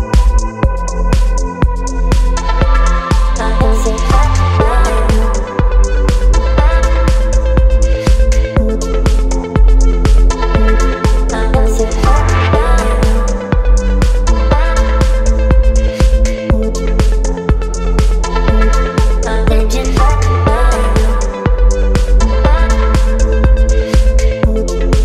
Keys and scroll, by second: 8.9 x, 16.3 ], 19.2 space.